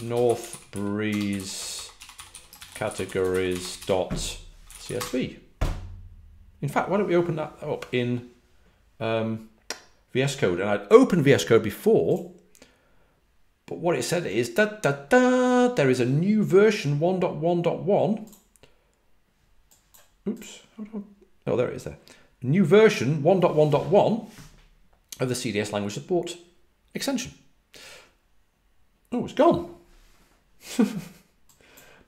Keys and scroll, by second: 0.0-5.4 typing.